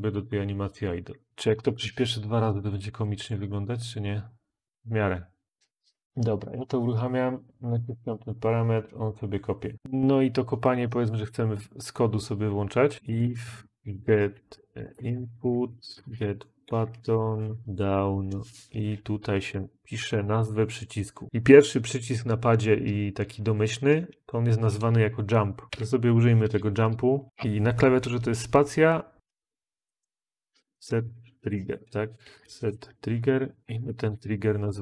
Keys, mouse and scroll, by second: 1.4 typing, 1.6 Return, 12.7-20.8 typing, 25.7 Escape, 25.7 End, 27.3 Return, 29.0-34.8 typing, 34.5 ctrl+s.